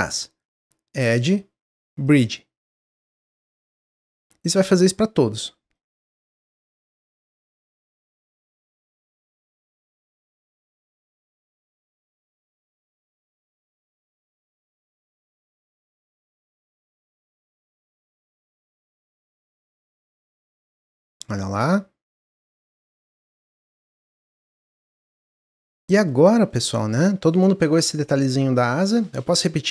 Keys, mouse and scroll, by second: 0.9-3.7 drag, 4.0 middle click, 4.5 shift+click, 5.7-7.3 drag, 7.6 middle click, 8.1 shift+click, 9.3-10.6 drag, 10.9 middle click, 11.4 shift+click, 12.1-13.6 drag, 13.8 middle click, 14.6 shift+click, 15.5-16.9 drag, 17.1 middle click, 17.6 shift+click, 18.5-20.1 drag, 20.4-23.4 middle drag, 24.8 click, 25.3 middle click, 26.1-26.5 scroll up 1, 26.5 middle click, 26.9 scroll down 2.